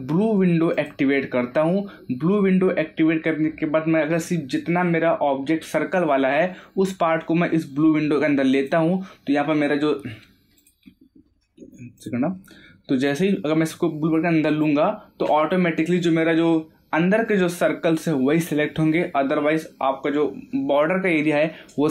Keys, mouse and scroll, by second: 0.7 click, 8.5 click, 14.4 click.